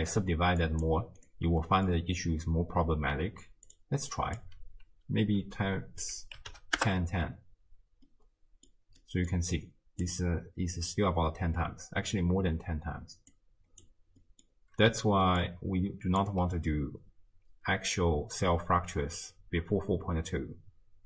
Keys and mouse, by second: 0.6 click, 1.7 middle drag, 3.7 click, 4.1-6.9 drag, 8.2-8.7 middle drag, 9.0 middle click, 9.5 click, 13.3-13.8 drag, 14.2 middle drag, 14.9 d, 15.4 click, 16.3 d, 16.3 d, 16.8 d.